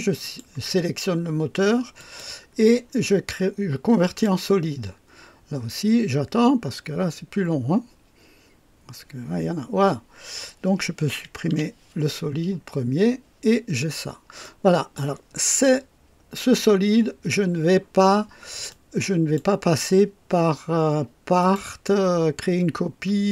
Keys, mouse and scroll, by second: 0.2 click, 1.9 click, 4.0 click, 11.5 Delete, 14.4-15.1 drag, 18.6-19.5 drag, 21.3 click, 21.5 click.